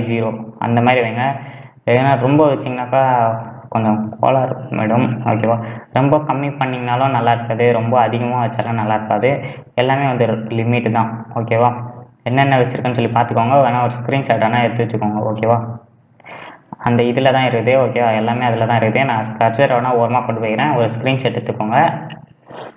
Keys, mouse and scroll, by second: 3.5-4.1 scroll up 2, 4.1-4.5 scroll down 2, 4.5-6.7 middle drag, 6.7-9.7 drag, 20.3 middle click.